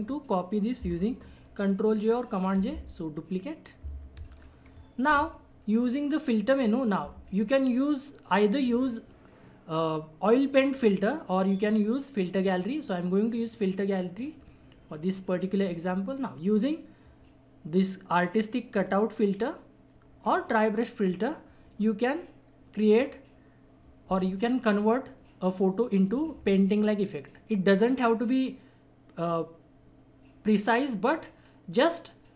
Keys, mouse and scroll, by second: 2.5 j, 3.1 click, 4.2 ctrl+z, 6.2 click, 12.5 click, 14.1 click, 18.7 click, 22.8 click.